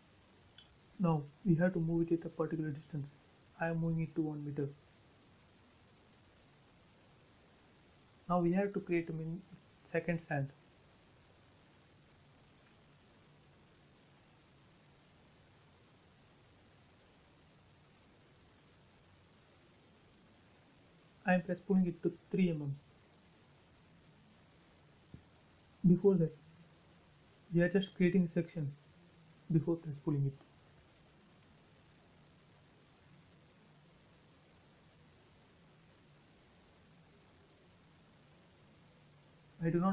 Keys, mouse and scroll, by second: 0.4 scroll down 1, 1.0 m, 1.4 click, 2.5 Right, 2.8 1, 3.0 Return, 3.3 space, 4.1 click, 4.6-5.1 scroll up 1, 5.2 shift+middle click, 6.4-7.2 scroll up 1, 8.5 c, 9.0 click, 10.7 space, 11.0 scroll up 1, 11.3 shift+middle click, 12.5 click, 13.6 middle click, 14.5 p, 14.8 click, 16.9-17.9 typing, 17.6 Return, 18.8-20.6 scroll up 1, 20.9 ctrl+z, 22.5-22.9 scroll down 1, 22.9 middle click, 23.4 scroll down 1, 23.6 shift+middle click, 24.6 r, 26.2 click, 27.1-28.6 scroll up 1, 29.2 click, 29.4 space, 30.0 e, 30.2 click, 34.3 ctrl+z, 35.7-36.1 scroll up 1, 36.1 click, 36.2 click, 37.0-37.7 scroll up 1, 37.9 ctrl+z, 38.3 space, 38.5 scroll down 1, 39.5 l.